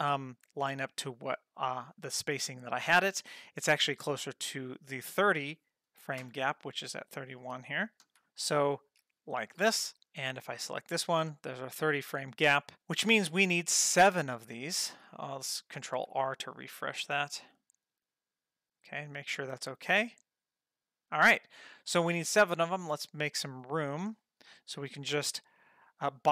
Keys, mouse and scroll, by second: 1.0 click, 3.5 click, 4.9 click, 6.2 Right, 8.2 shift+s, 10.7 click, 12.9-14.8 drag, 16.0 ctrl+r, 17.1-21.6 drag, 23.4 click, 24.4 middle click, 24.9 ctrl+middle click, 25.6 click, 26.0 click.